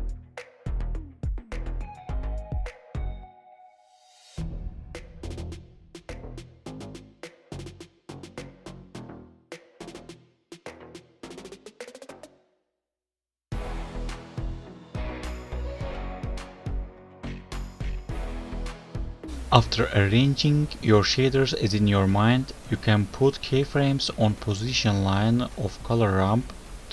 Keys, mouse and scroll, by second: 0.4 click, 1.4 click, 2.1-2.7 scroll down 4, 2.7 n, 3.1 scroll up 2, 3.3 alt+right click, 4.5-5.0 scroll up 4, 5.3 click, 9.5 click, 13.2 click, 17.9 alt+right click, 18.7 click, 19.2-20.2 scroll up 11, 19.2 g, 20.9 alt+right click.